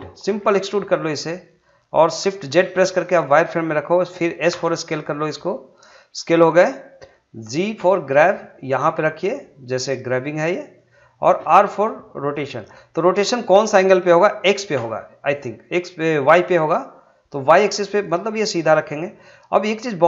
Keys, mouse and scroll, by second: 1.4 click, 2.5 shift+z, 4.5 s, 5.8 click, 7.8 g, 10.7 click, 11.6 r, 14.7 r, 19.1 click, 19.6-20.0 scroll down 1.